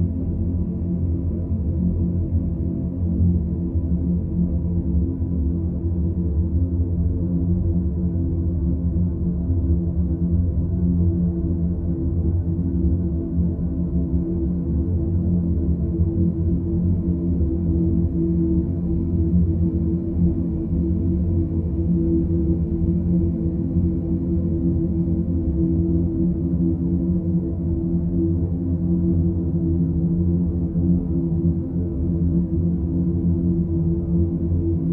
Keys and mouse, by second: 0.0 click, 0.5-3.8 ctrl+z, 5.6 Tab, 6.8 Tab, 8.0 a, 8.8 s, 10.9 g, 22.9 click, 24.7-27.2 drag, 28.5 click, 28.9 click, 33.8 Tab.